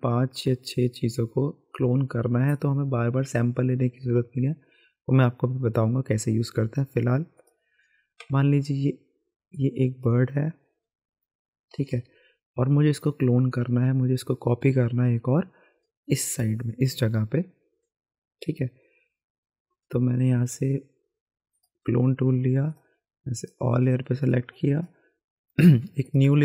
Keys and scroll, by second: 11.7 b, 11.9 b, 12.1 b.